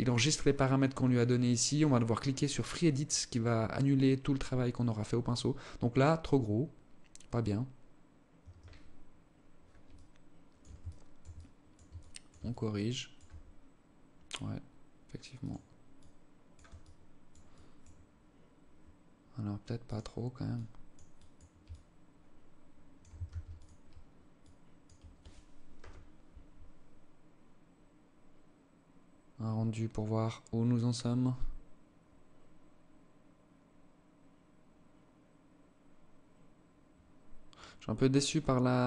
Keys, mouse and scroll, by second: 7.7 Escape, 9.3 alt+click, 10.2 alt+shift+click, 10.7 alt+click, 11.3 alt+shift+click, 11.8 alt+click, 12.7-13.1 scroll down 4, 13.1 scroll up 1, 14.7 click, 15.3 click, 16.3 click, 17.0 click, 19.2 click, 19.9 click, 20.5 click, 21.0 alt+click, 22.6 ctrl+s, 23.7 alt+click.